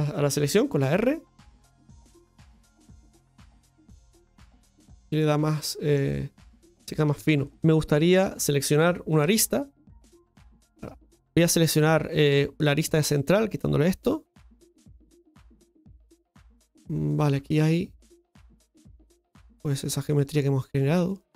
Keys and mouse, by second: 3.4 Tab, 4.1-5.9 middle drag, 6.5 shift+middle drag, 7.0 Tab, 7.4 middle click, 8.1 right click, 11.0 Tab, 11.5 middle click, 12.2 Tab, 12.4 shift+middle click, 13.4-14.7 drag, 14.7-21.3 middle drag.